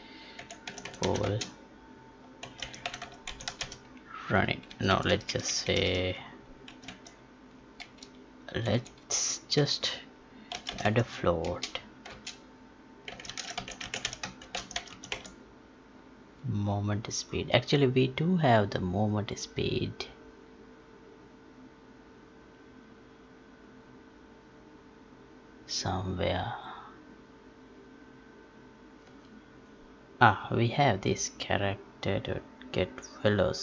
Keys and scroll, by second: 1.2 space, 12.0 space.